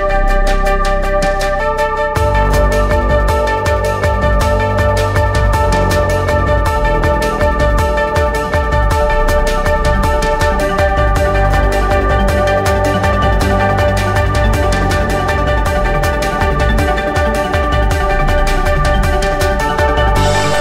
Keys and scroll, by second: 6.2 2, 6.6 5, 8.4 Return, 14.2 ., 14.2 2, 14.5 Return.